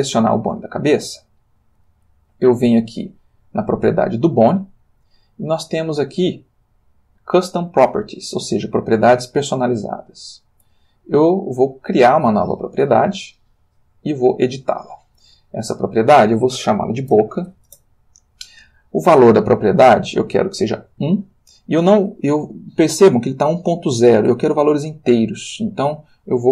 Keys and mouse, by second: 0.8 Escape, 3.4 click, 10.0 click, 12.2 click, 14.6 click, 15.7 click, 17.1 shift+b, 17.3 shift+o, 17.4 shift+c, 17.7 shift+Return, 19.9 click, 21.0 1, 21.8 Escape, 25.8 click.